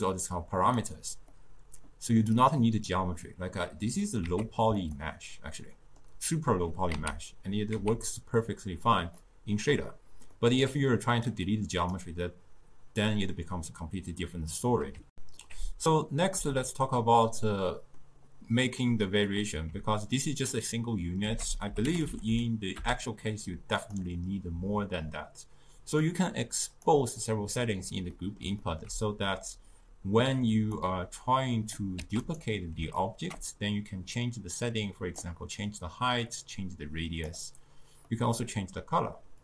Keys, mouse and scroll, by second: 1.4-4.3 middle drag, 4.3 z, 5.6-7.0 middle drag, 7.0 z, 7.8 z, 9.2-11.4 middle drag, 11.4-14.4 drag, 15.1 ctrl+alt+shift+q, 16.9-19.9 middle drag, 21.3 ctrl+a, 26.1-27.3 drag, 28.2-29.6 middle drag, 29.6 click, 32.1 shift+d, 33.0-34.2 ctrl+middle drag, 34.2-38.1 drag, 38.1-39.4 middle drag.